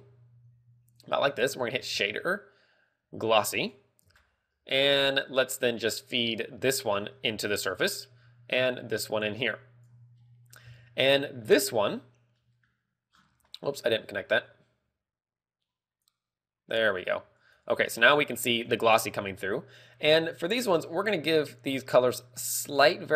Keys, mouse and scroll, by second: 13.4 click, 13.6 ctrl+click.